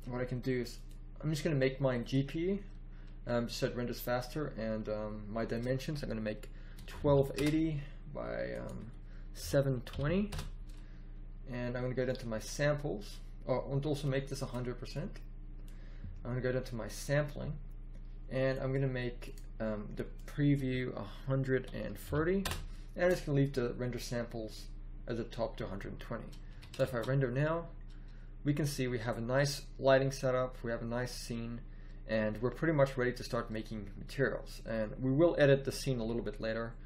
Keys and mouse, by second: 5.5-7.0 drag, 7.3-8.4 middle drag, 10.4-12.0 middle drag, 12.0-14.0 drag, 14.9-16.6 drag, 18.5-21.7 drag, 26.4 a, 27.0 shift+z, 35.9 n.